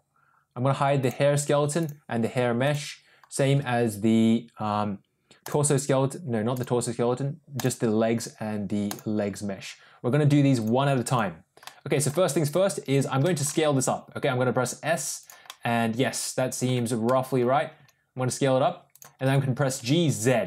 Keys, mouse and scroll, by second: 1.7 click, 2.5 click, 5.3 click, 6.4 click, 7.5 click, 8.8 click, 10.5 click, 11.0 click, 11.6 middle click, 13.1 middle drag, 13.4 s, 15.4-16.6 middle drag, 17.0 middle click, 17.7 s, 19.2 g.